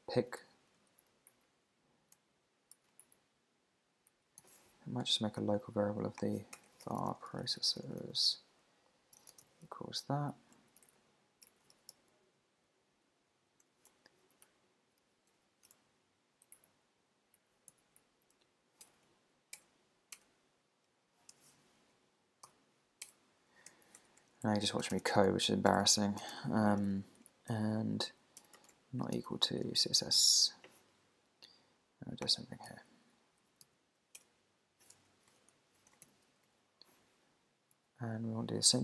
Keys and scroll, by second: 0.4 alt+Left, 0.9 shift+super+Left, 1.3 alt+shift+Right, 2.7 Left, 3.0 alt+shift+Right, 4.1 alt+shift+Left, 4.4 super+c, 6.6 Return, 10.6 super+Left, 11.0 alt+Right, 11.5 alt+shift+Right, 11.7 super+e, 11.9 super+g, 13.5 shift+super+g, 14.7 Left, 15.8 alt+Left, 16.6 alt+shift+Right, 17.7 super+d, 18.0 Right, 18.5 alt+Left, 21.3 Home, 24.4 Left, 25.2 Left, 25.7 Left, 26.8 Left, 28.7 shift+1, 30.3 super+s, 32.8 alt+shift+Right, 33.6 super+d, 34.9 Escape, 37.7 super+s.